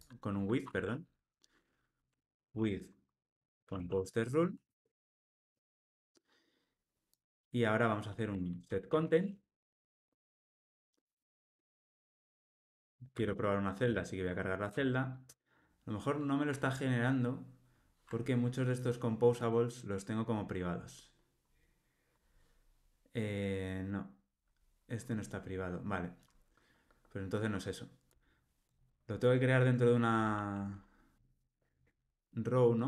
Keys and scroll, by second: 1.8 alt+shift+Right, 4.9 Return, 10.3 Return, 14.6 Escape, 26.5 alt+super+[, 32.4 alt+super+[.